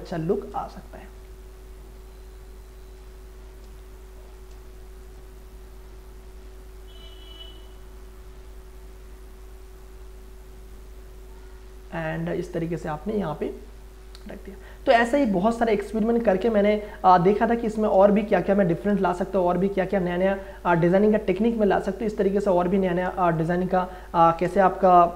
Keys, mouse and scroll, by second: 1.8-2.5 scroll up 1, 2.5 click, 3.7 ctrl+space, 3.9 ctrl+click, 4.3 ctrl+space, 5.0-15.1 drag, 15.1-18.0 drag, 18.0 ctrl+space, 18.2 ctrl+click, 18.5 ctrl+space, 19.6-22.1 drag, 22.1 click, 23.1 ctrl+space, 23.3 ctrl+click, 23.4 ctrl+click, 23.6 ctrl+space.